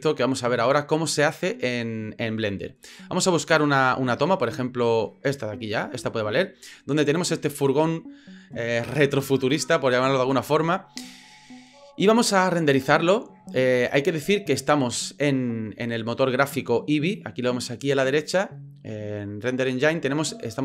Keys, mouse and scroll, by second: 5.2 click, 16.1 click.